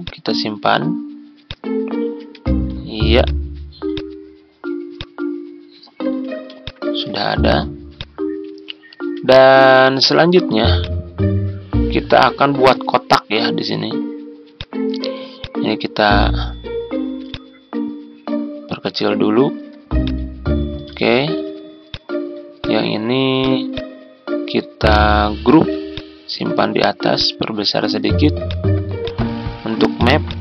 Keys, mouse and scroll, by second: 1.4 shift+click, 2.2 typing, 3.2 click, 5.4 ctrl+click, 6.6 shift+click, 7.1-7.4 typing, 8.3 ctrl+scroll down 1, 10.3 z, 10.7-16.4 drag, 17.2-19.6 ctrl+drag, 20.0 click, 21.2 ctrl+g, 21.8-25.0 drag, 25.5 ctrl+g, 25.9 click, 28.4-30.4 drag.